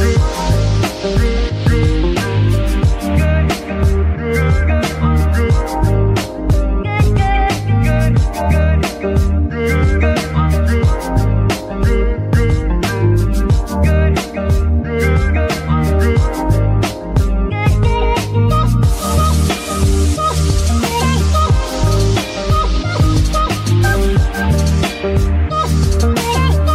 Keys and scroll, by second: 7.5 KP_Divide, 14.8-16.9 typing, 18.5 g, 19.6 s, 20.3 Tab, 20.7 s, 22.3 g, 25.2 KP_3.